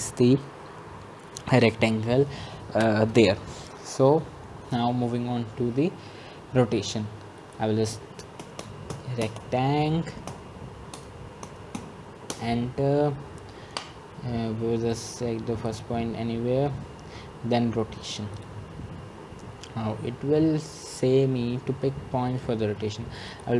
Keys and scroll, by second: 11.2-13.2 typing.